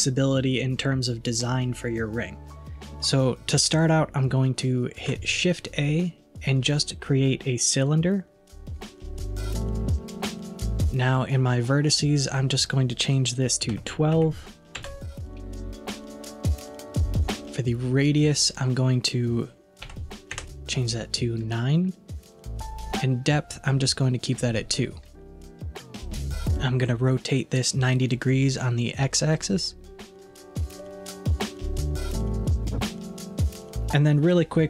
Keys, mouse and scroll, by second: 5.0 shift+a, 12.2-15.3 drag, 18.4-21.6 drag, 30.7-33.7 middle drag.